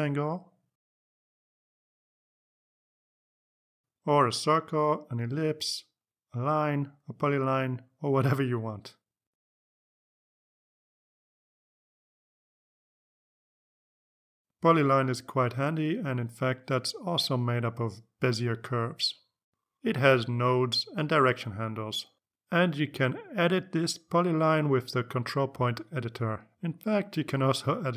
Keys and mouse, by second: 3.4 click, 9.8 click, 10.7-12.3 drag, 13.0 click, 15.4 click, 16.2 click, 17.4 click, 18.2-19.3 drag, 19.6-21.4 drag, 22.8 click, 24.6 click, 25.8 click, 27.6 click.